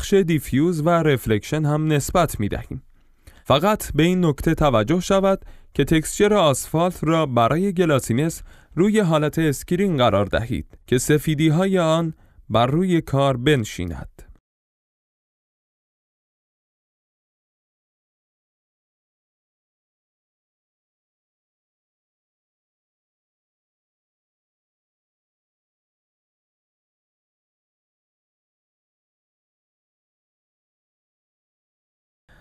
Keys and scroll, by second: 3.4 F11, 14.9-18.2 typing, 29.5-30.8 typing.